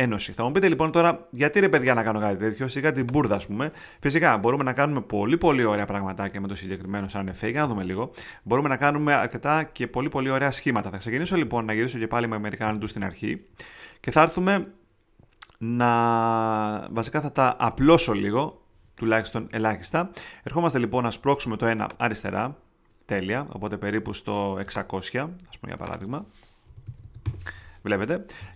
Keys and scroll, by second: 7.6 super+z, 11.4 super+z, 12.6 super+z, 26.4-27.3 typing.